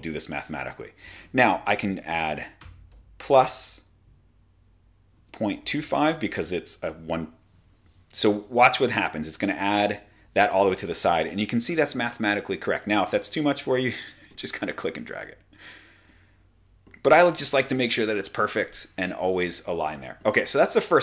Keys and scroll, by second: 5.2-6.3 typing, 9.9 Return.